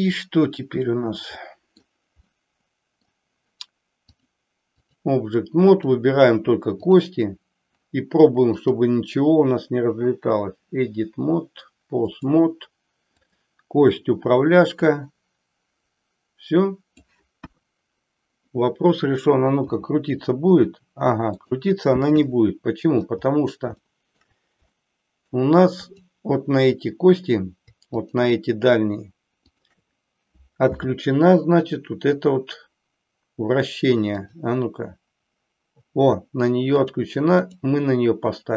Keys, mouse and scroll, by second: 1.6 middle click, 2.3-3.1 middle drag, 4.1 click, 5.7 click, 6.8 click, 8.6-12.2 drag, 13.1 click, 14.7-17.0 drag, 17.4 KP_1, 19.6 r, 22.2-23.1 middle drag, 23.7-24.3 shift+middle drag, 24.7-25.5 middle drag, 25.8 click, 28.0 shift+click, 29.5-30.1 shift+drag, 30.7 n, 34.1 click, 36.8 click.